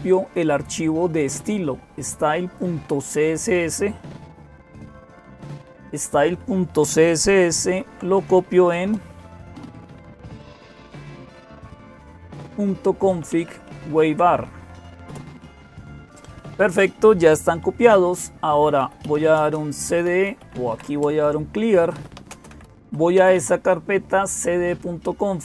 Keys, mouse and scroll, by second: 0.0-25.4 typing, 14.9 Return.